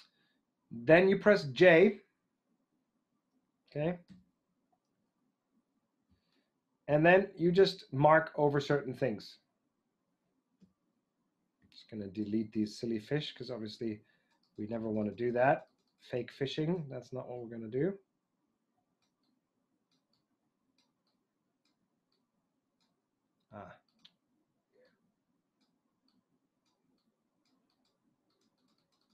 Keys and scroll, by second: 4.0 j, 10.6 e.